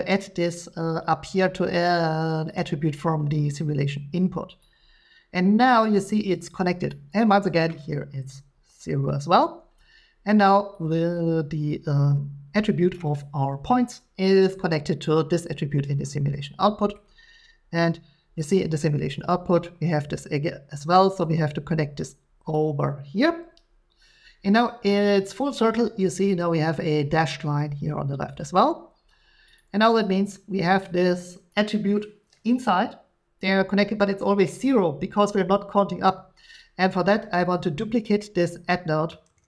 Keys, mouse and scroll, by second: 4.6 click, 6.9 click, 12.9 click, 15.0 click, 16.9-18.0 scroll, 18.5 click, 22.5 click, 24.8-27.6 drag, 29.5 click, 31.5 click, 37.5 click, 38.4 middle click, 39.3 d.